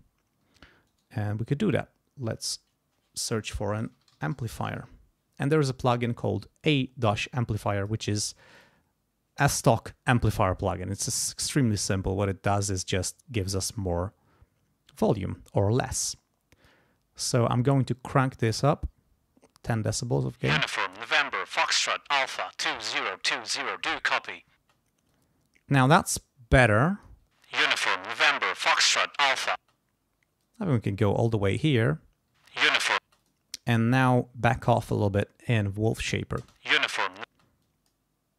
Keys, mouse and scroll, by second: 0.9 right click, 2.3 click, 3.5-5.3 typing, 7.7 click, 8.5 click, 9.9-11.1 drag, 13.7 right click, 15.0 click, 16.0 click, 18.1-20.1 drag, 20.2 space, 24.6 space, 25.1-27.2 drag, 27.3 space, 29.6 space, 30.4 click, 32.3 space, 33.0 space, 33.2 click, 33.9 click, 35.1 click, 36.4 space, 37.3 space, 37.6 click.